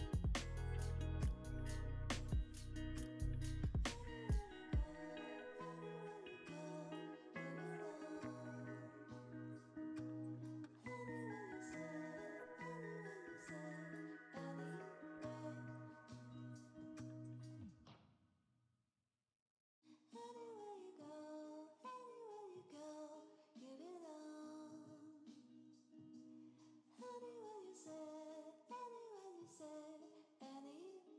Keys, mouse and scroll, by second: 5.1 double click, 6.5-9.6 typing, 10.8 s, 11.6 v, 11.8 g, 12.0 Return, 12.0 g, 28.3 s, 28.7 v, 28.9 g.